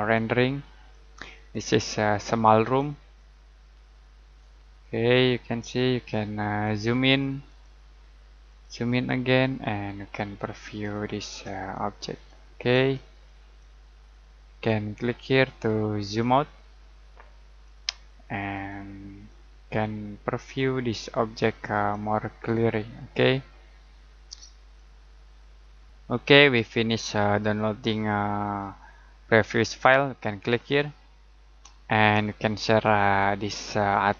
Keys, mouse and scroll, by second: 28.6 click.